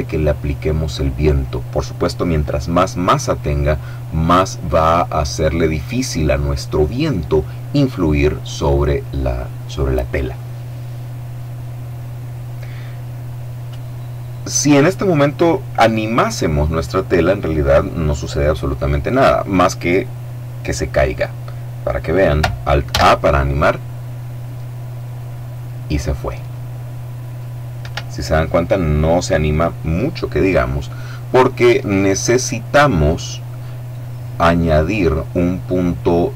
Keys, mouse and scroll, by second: 22.7 alt+a, 27.6 Escape.